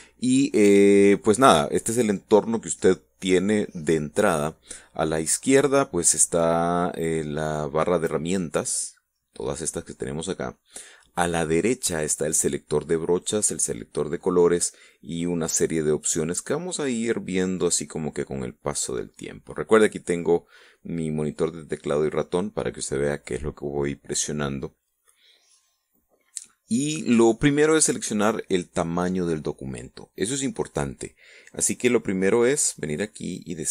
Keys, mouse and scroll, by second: 32.7 click.